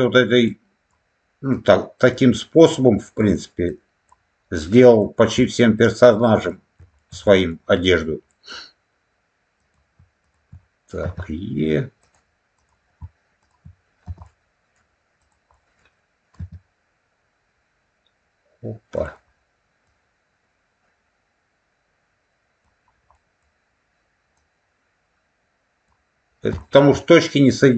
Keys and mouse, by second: 0.4 click, 1.4 click, 2.7 click, 3.5 click, 4.5 click, 5.3 middle click, 6.4 shift+middle click, 7.2 middle click, 7.6 middle click, 8.2 middle click, 9.5 click, 10.1 shift+click, 11.0 e, 11.9 click, 12.4 click, 13.3 shift+click, 14.2 middle click, 15.1 click, 15.4 middle click, 16.3 e, 18.9 click, 19.7-22.5 drag, 23.0 middle click, 24.3-25.8 drag, 26.5 shift+middle click.